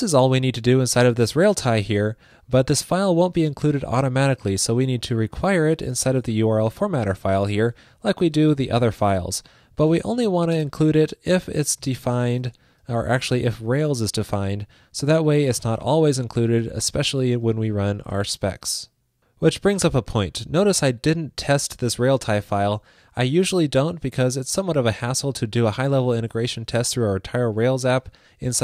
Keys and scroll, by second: 6.2 ctrl+shift+d, 9.5 super+Right, 18.2 super+s.